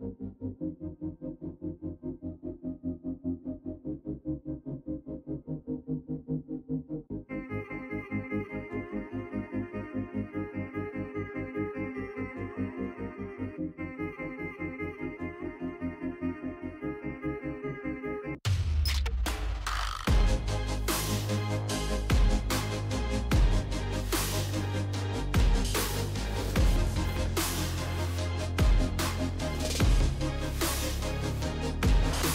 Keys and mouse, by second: 1.6 ctrl+r, 2.8 s, 8.3 ctrl+l, 9.4 g, 15.0 s, 17.9 alt+z, 18.2 click, 19.9 alt+click, 20.3 middle click, 21.6 e, 24.7 alt+z, 25.0 click, 25.7 alt+z, 25.9 click, 26.6 g, 28.4 Tab, 29.5 KP_Decimal, 30.2 click, 31.3 click.